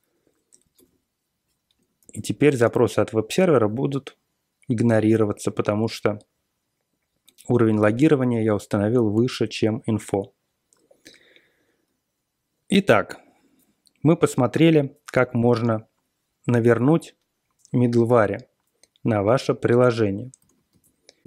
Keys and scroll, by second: 0.0-0.7 typing, 0.7 super+Tab, 2.0 super+r, 2.7 super+r, 20.3 ctrl+x.